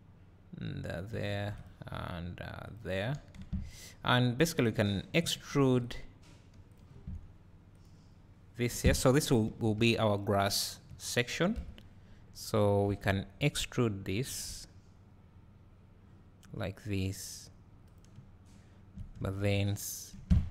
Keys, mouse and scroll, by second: 0.9 click, 1.3 ctrl+r, 2.7 click, 3.4 3, 3.8 click, 5.5 ctrl+r, 6.7 click, 8.7 3, 8.9 click, 10.6 ctrl+click, 11.5 KP_Decimal, 12.3 scroll up 1, 12.6 `, 13.2 scroll up 1, 14.3 e, 18.2 `, 20.2 2.